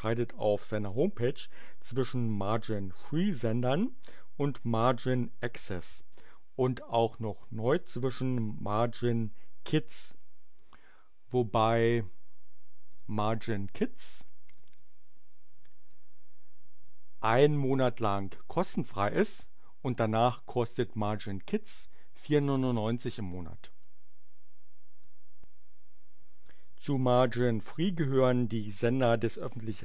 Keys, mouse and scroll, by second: 11.4 click, 12.8 click, 14.4 click, 15.8-18.3 drag, 23.7-25.2 drag.